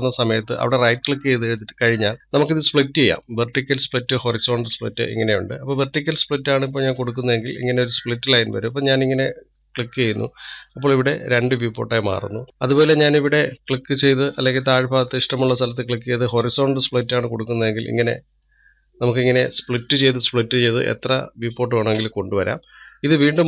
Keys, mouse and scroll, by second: 0.9-8.1 right drag, 15.7-18.7 right drag.